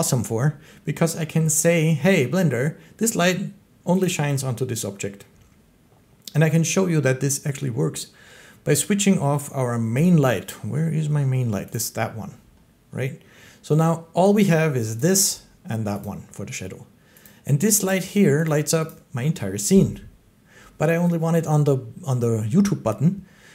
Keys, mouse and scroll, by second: 4.0 click, 11.6 middle click, 12.8 click, 14.9 click, 15.9 click, 17.1 click, 17.7 click, 18.3 click, 18.7 click.